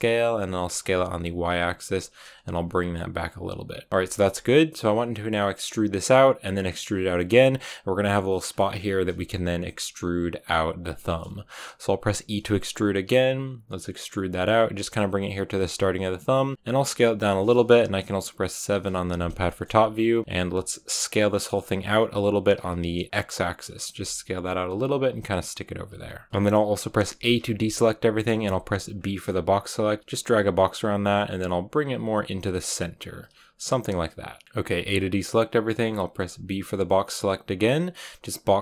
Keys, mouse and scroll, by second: 3.9-12.0 shift+middle drag, 14.6-16.7 typing, 18.5 KP_7, 19.4 shift+middle click, 19.8-20.4 scroll down 1, 20.4 s, 23.8 g, 24.6 s, 25.3 g, 25.8 s, 26.3-27.1 scroll up 2, 27.1 a, 30.3 r, 31.3 b, 31.3 g.